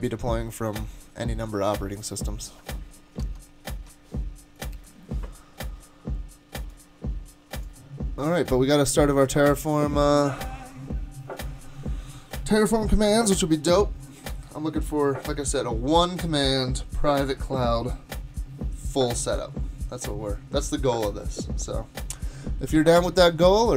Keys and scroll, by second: 3.2 super+Tab, 22.8 super+Tab.